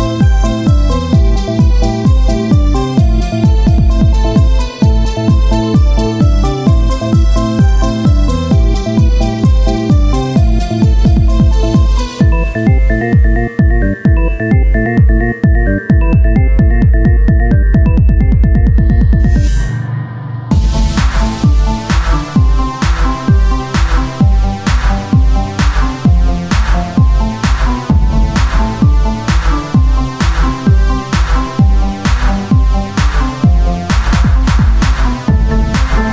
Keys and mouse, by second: 0.7-2.3 drag, 2.3-3.9 right drag, 5.5 z, 6.8 o, 7.2 s, 14.9 KP_1, 15.5 z, 17.0 c, 18.7-21.9 drag, 21.9 z, 23.8 Tab, 26.0-27.4 drag, 26.1 z, 26.6 c, 28.4-32.0 drag, 31.5 s, 32.0 z, 33.8 click, 35.5 z, 35.7 c.